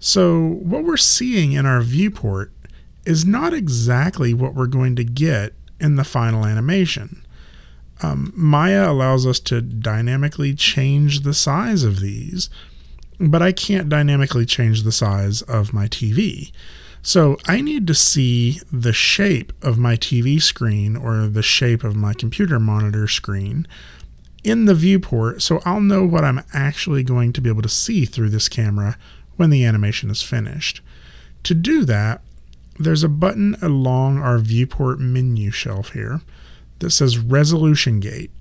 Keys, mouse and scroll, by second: 9.8 click.